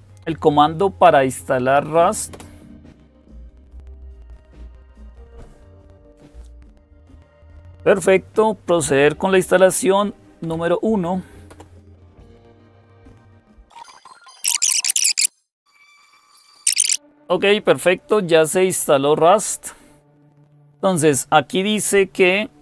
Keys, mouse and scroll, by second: 2.1 Return, 10.2 1, 11.3 Return, 15.9-22.6 drag.